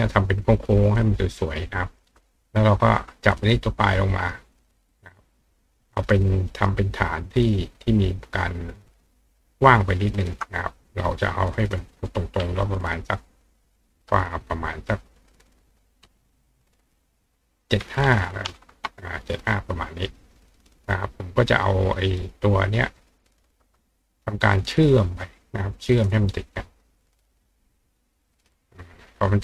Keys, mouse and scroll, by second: 1.0 click, 3.1 ctrl+click, 7.6 shift+click, 11.5 click, 15.3 click, 23.1 shift+click, 28.3 click.